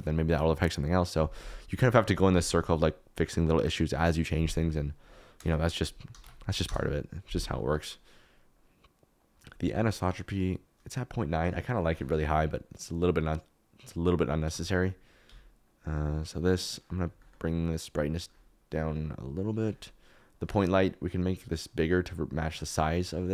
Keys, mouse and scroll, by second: 15.2 s, 21.2 click, 22.6 KP_Decimal.